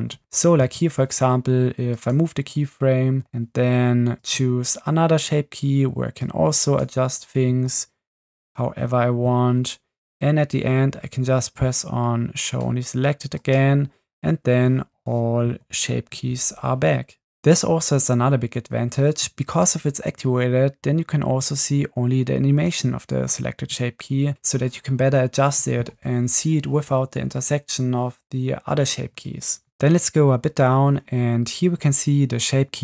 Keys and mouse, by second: 0.7 g, 4.3 click, 6.2-6.8 drag, 7.5 g, 13.8 click, 15.6 Left, 16.1 Right, 19.5 click, 22.6 space, 24.6 space, 32.7 click.